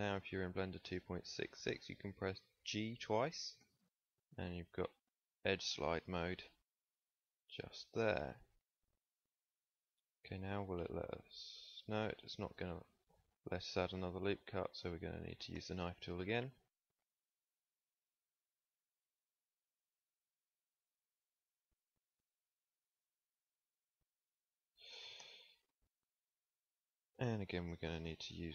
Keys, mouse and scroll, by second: 3.5 g, 10.3 ctrl+r, 14.6 a, 15.5 k, 26.6 z.